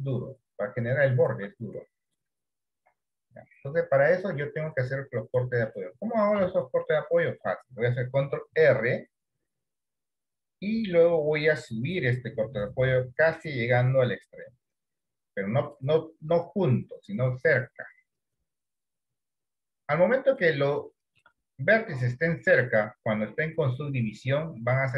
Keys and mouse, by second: 1.3 d, 1.7 d, 2.2 click, 3.6 d, 3.8 click, 4.2 d, 6.9 middle click, 8.6 ctrl+r, 18.0-20.5 drag, 21.0 shift+middle click.